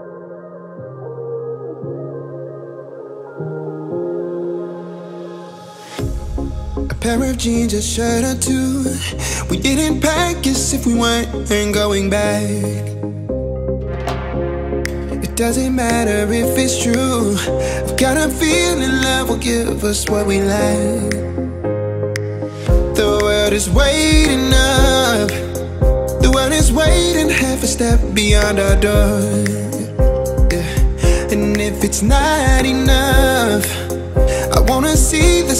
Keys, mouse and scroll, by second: 1.0-2.8 typing, 1.8 Return, 3.4 click, 4.2-6.8 typing, 6.3 scroll up 1, 7.4 click, 8.8 space, 9.4 p, 10.4 click, 11.2-13.0 typing, 13.2 scroll down 1, 13.7 shift+middle click, 14.4 click, 14.7 right click, 15.8 click, 16.1 space, 16.3 scroll up 1, 16.6 shift+middle click, 17.1 click, 18.1 t, 19.0 click, 22.6-25.2 typing, 25.8 click, 26.6-32.6 typing, 29.6 click, 30.4 click, 33.3 click, 34.2-35.5 typing.